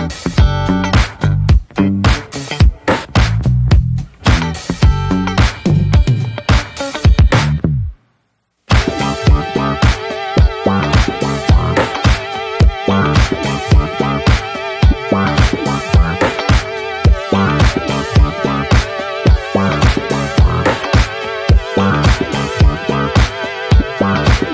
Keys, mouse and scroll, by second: 1.7 click, 4.0-9.9 drag, 9.9 scroll down 2, 10.1 shift+middle click, 10.4-11.5 scroll up 2, 12.0-17.2 drag, 18.7-23.2 drag, 23.4-24.5 shift+middle drag.